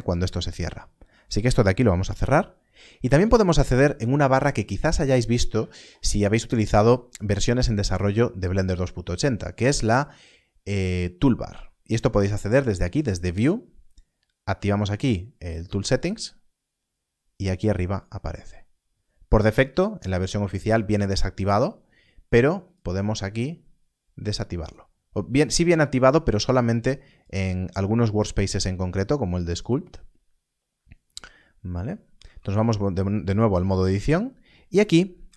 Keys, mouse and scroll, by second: 1.9 n, 12.9 click, 15.9 click, 22.7 click, 27.1 click, 29.5 click, 32.2 Tab, 35.1 Tab.